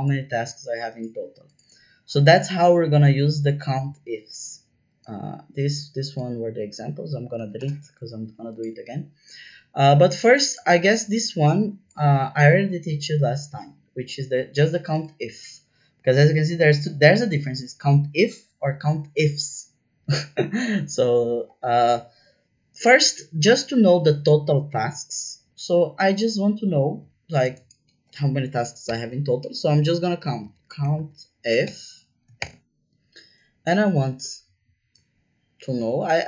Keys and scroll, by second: 7.6 BackSpace, 28.8 =, 29.9-32.3 typing.